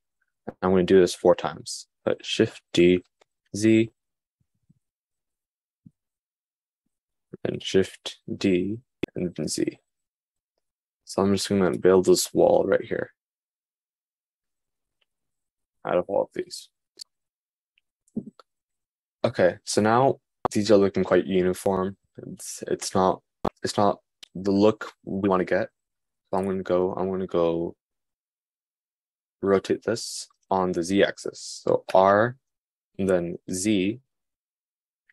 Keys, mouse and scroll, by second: 3.2 shift+d, 8.6 shift+d.